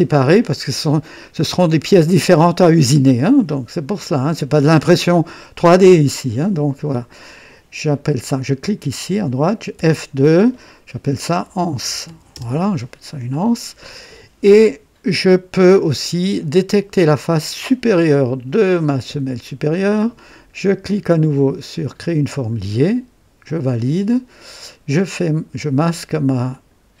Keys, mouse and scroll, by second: 8.6 click, 9.8 F2, 11.2-12.6 typing, 17.3 click, 22.0 click, 23.5 click, 26.5 click.